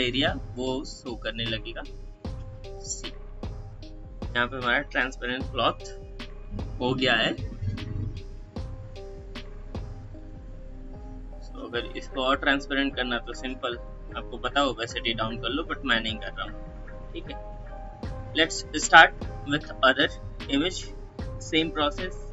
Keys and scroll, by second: 4.1 ctrl+0, 16.4 space.